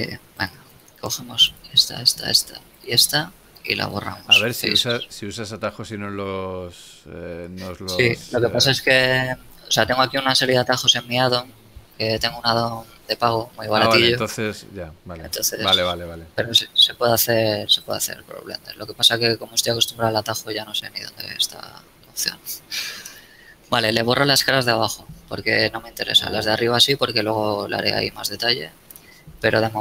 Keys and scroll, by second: 3.6 x, 6.9 ctrl+z, 21.3 x.